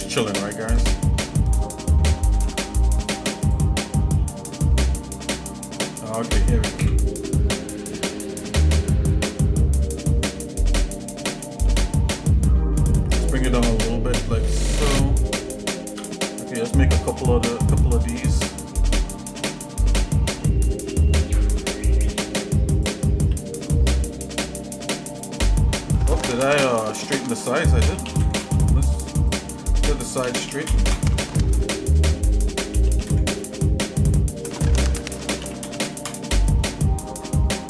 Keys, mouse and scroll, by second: 2.4 ctrl+Tab, 3.4 click, 4.2 shift+middle click, 4.9-5.8 scroll down 4, 5.9 scroll up 1, 6.7 KP_1, 8.8 shift+middle click, 9.8 scroll up 1, 10.3-10.6 scroll up 2, 11.3 g, 16.3 KP_7, 17.5-17.8 scroll up 2, 18.1 middle click, 19.3 shift+d, 23.3 shift+d, 25.8 ctrl+Tab, 26.9 click, 27.8 s, 29.2 click, 30.2 s, 32.1 click, 32.6 s, 34.4 click, 35.4 s.